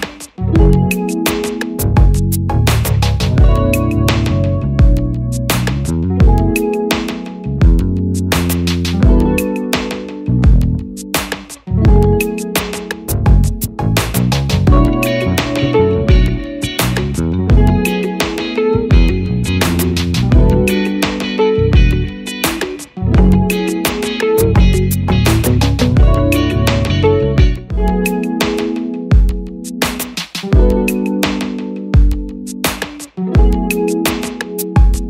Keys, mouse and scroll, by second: 3.9 ctrl++, 4.7-5.1 scroll down 1, 6.3 ctrl++, 7.1 scroll up 1, 8.3 ctrl++, 11.1 click, 19.4 ctrl++, 20.2 scroll up 1, 22.0 scroll up 1, 24.8 ctrl+-, 31.0 click.